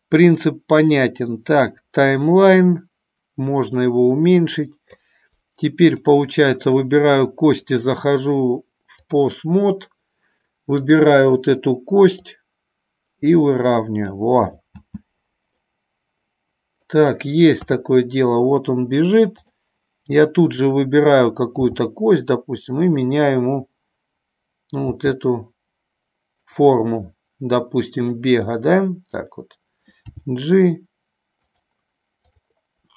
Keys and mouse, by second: 4.1-5.3 drag, 5.9 click, 7.9-9.3 drag, 10.9 click, 12.3-14.2 drag, 14.8 space, 15.6-17.0 middle drag, 17.7 KP_3, 19.3 click, 21.7 g, 25.0 g, 26.5 click, 28.1 click, 30.2 g, 31.6 click, 32.3 click.